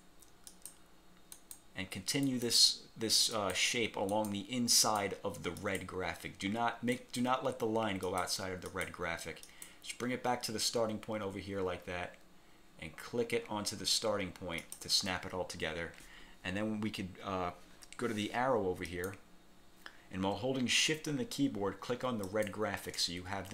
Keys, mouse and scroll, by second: 0.6 click, 1.5 click, 2.4 click, 3.5 click, 4.2 click, 4.9 click, 5.7 click, 7.1 click, 8.1 click, 8.8 click, 9.5 click, 14.7 click, 18.9 click, 22.4 shift+click.